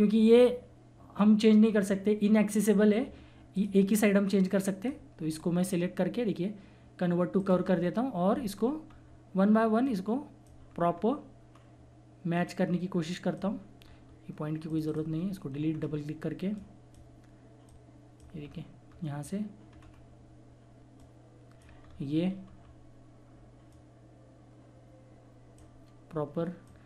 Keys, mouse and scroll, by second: 3.5-6.3 drag, 7.4 click, 8.2 scroll up 1, 9.8 click, 10.6 scroll down 1, 11.6-12.3 scroll up 1, 12.3-13.8 drag, 13.8 scroll down 1, 14.7 click, 15.7 scroll up 1, 16.5-18.4 drag, 18.4 scroll down 1, 20.9 click, 21.8 scroll down 1, 22.4 scroll up 1, 23.7-26.8 drag.